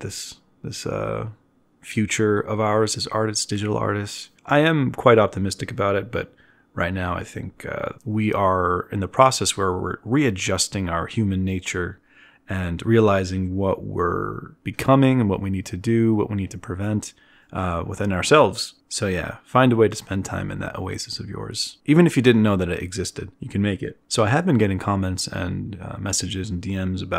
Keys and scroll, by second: 18.9 z.